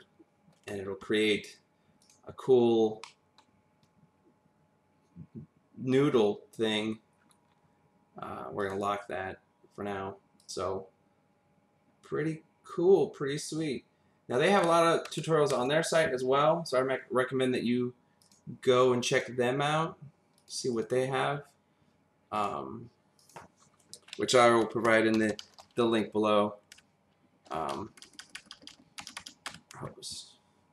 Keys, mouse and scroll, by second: 2.0 click, 2.6-3.0 scroll up 1, 3.0 middle click, 7.1-8.6 scroll up 2, 8.6 click, 10.4 click, 15.5 ctrl+z, 18.2 click, 19.2 click, 20.4 click, 20.8 click, 22.4 click, 23.2 click, 24.6-25.6 typing, 26.7 Down, 27.9-29.2 typing, 29.5 Return.